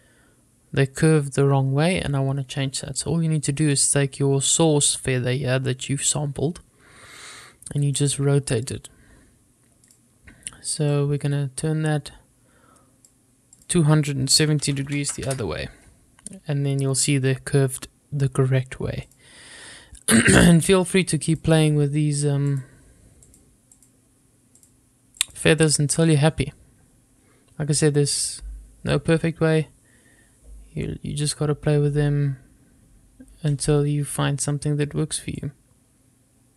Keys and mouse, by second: 3.8 click, 8.2-10.1 drag, 11.2-13.3 drag, 13.8-16.1 drag, 22.7 click, 23.5 click, 24.0 click, 24.8 click, 25.4 click, 25.9 click, 35.6-36.5 drag.